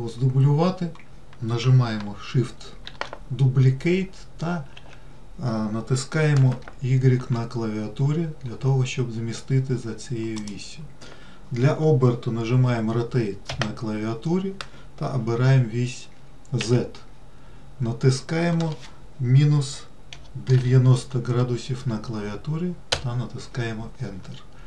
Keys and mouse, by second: 3.2 shift+d, 13.8 r.